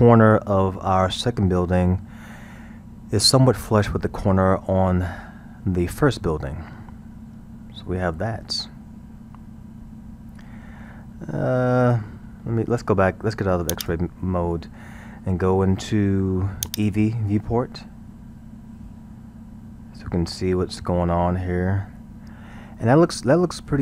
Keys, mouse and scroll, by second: 6.7-9.6 middle drag, 13.7-14.5 drag, 14.5-17.3 middle drag, 17.3 click, 17.8-20.8 middle drag.